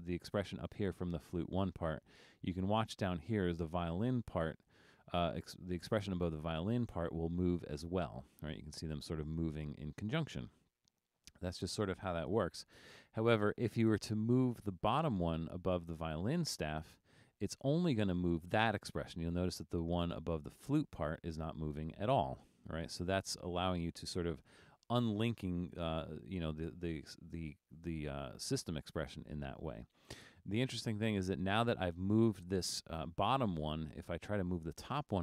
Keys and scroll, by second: 12.8 super+z.